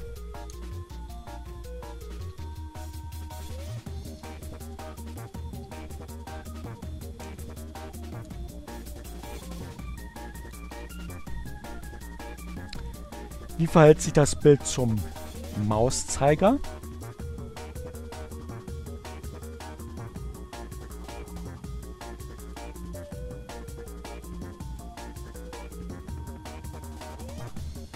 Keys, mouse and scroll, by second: 2.8 ctrl+alt+w, 4.0 click, 4.3-5.3 typing, 6.5 BackSpace, 6.8 Return, 8.9 ctrl+alt+w, 9.6 ctrl+alt+w, 15.5 click, 17.7-19.8 drag, 21.6-22.7 drag, 23.2-26.3 drag, 26.8 ctrl+alt+w.